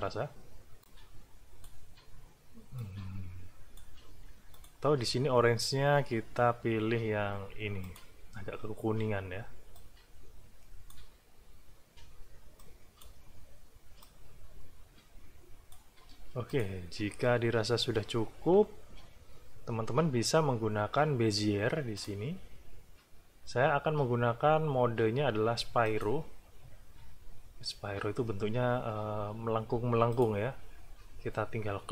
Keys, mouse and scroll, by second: 0.8 click, 2.7-3.9 drag, 4.5 click, 6.1 middle click, 7.8 click, 9.7-11.1 drag, 12.6 click, 14.0-15.9 drag, 16.1 space, 16.5 ctrl+click, 16.9-17.3 ctrl+scroll down 2, 17.7 ctrl+scroll up 2, 18.2 ctrl+scroll down 2, 19.4 scroll down 2, 21.9 click, 25.8 click, 30.1 click.